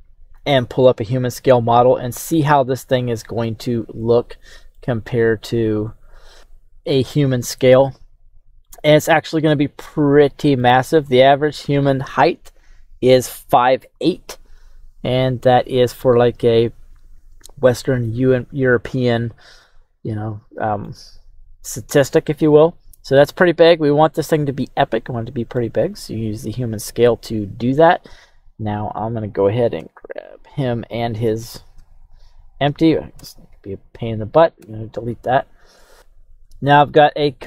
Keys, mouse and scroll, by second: 1.1 click, 2.1-2.9 scroll down 2, 2.9 middle click, 3.6-4.1 scroll down 2, 4.0-4.7 middle drag, 6.3 click, 7.4-8.6 scroll down 7, 8.6-10.6 middle drag, 11.0-11.6 scroll up 6, 14.8-16.0 scroll down 6, 16.0-20.8 middle drag, 22.4-23.5 scroll up 4, 23.5 scroll down 1, 23.6-24.3 scroll down 4, 24.3-25.5 middle drag, 25.8-27.0 scroll up 6, 27.1 right click, 28.1 right click, 30.4 shift+right click, 31.5 right click, 32.3 shift+right click, 33.1 Delete, 33.8 right click, 34.6 Delete, 36.9-37.4 right drag.